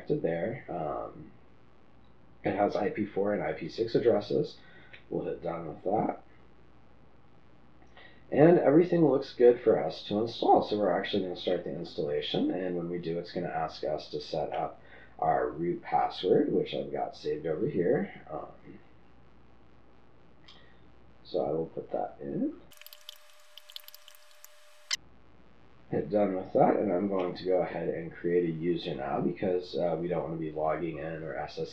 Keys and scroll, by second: 22.7-26.1 typing.